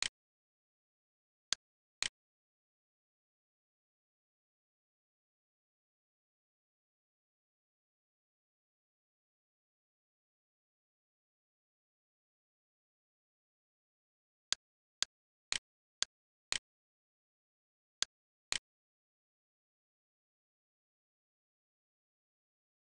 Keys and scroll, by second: 2.3 1, 3.3 ., 4.6-5.4 typing, 5.8 Return, 12.4 e, 19.1 1, 20.6-22.1 typing.